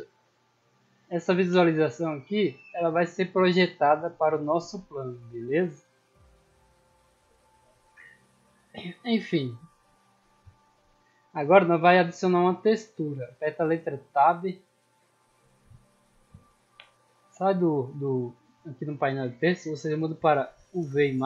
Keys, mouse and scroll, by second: 0.2 right click, 2.6 middle drag, 2.8-3.4 scroll down 4, 5.0 right click, 5.7 shift+middle drag, 6.0 scroll up 2, 6.5 middle drag, 9.3-10.4 middle drag, 14.1 Tab, 16.2-17.5 scroll up 2, 17.8 click, 20.7 click.